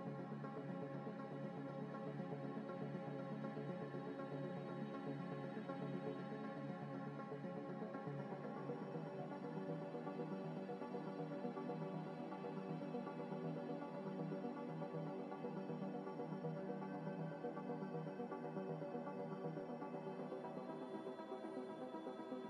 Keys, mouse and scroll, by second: 1.2 g, 1.2 z, 1.6 s, 3.7 z, 4.0-4.6 scroll up 1, 5.1 scroll down 1, 5.3 middle click, 5.9 g, 5.9 z, 6.4 double click, 6.7 Tab, 6.9 a, 7.5 u, 8.8 scroll up 1, 9.5 u, 10.7 u, 11.5 Tab, 12.1 scroll down 1, 12.2 middle click, 12.3 scroll up 1, 13.0 middle click, 14.9-15.2 scroll down 1, 15.2 Escape, 15.8 double click, 15.9 alt+Tab, 16.9-19.4 typing, 18.6 scroll, 18.7 scroll down 1, 19.2 click, 20.4 z, 20.9 s, 21.7 z, 21.9 z.